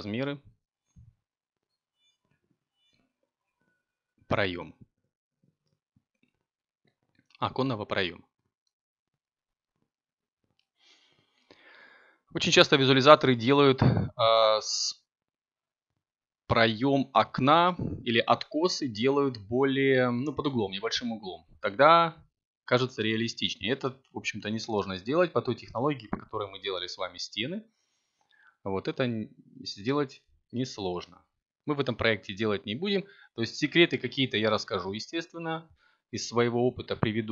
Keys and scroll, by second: 3.1 a, 4.1 b, 14.2 3, 18.6 a, 19.7 Tab, 25.8 g, 27.0 z, 32.0 Tab, 34.3 b.